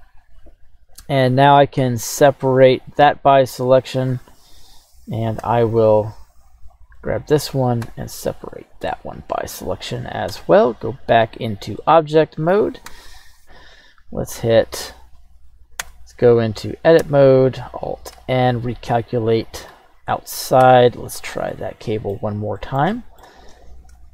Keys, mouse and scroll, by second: 1.7 q, 3.7 right click, 4.0 Tab, 4.6 right click, 5.4 l, 5.7 right click, 6.2 l, 6.9 scroll down 1, 7.0 middle click, 7.8 q, 10.3 Tab, 10.8 middle click, 11.8 middle click, 12.8 KP_1, 13.3 right click, 13.5 scroll up 2, 13.8-14.3 scroll down 1, 14.6 alt+n, 15.2-15.8 right drag, 15.8 Tab, 16.3 right click, 17.0 a, 18.1 alt+n, 20.6 Tab, 21.4 scroll down 1, 21.5-22.1 middle drag, 22.6-22.9 middle drag, 22.9 shift+middle drag, 23.8 alt+shift+c.